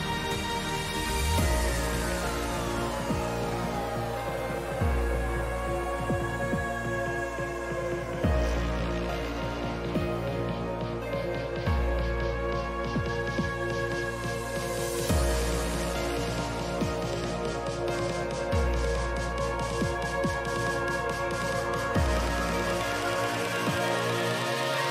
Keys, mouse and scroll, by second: 9.6-13.1 middle drag, 13.1-14.6 scroll up 1, 14.6-22.9 middle drag.